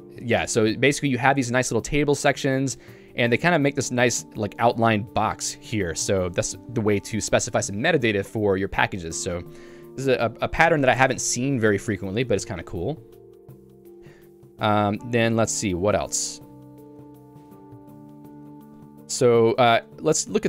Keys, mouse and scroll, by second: 13.7 Return, 14.8 Return.